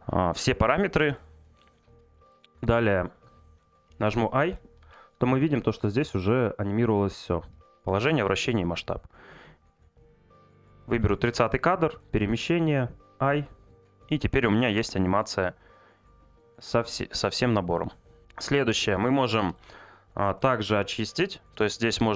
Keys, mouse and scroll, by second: 2.1-10.6 middle drag, 11.9 click, 14.6 click.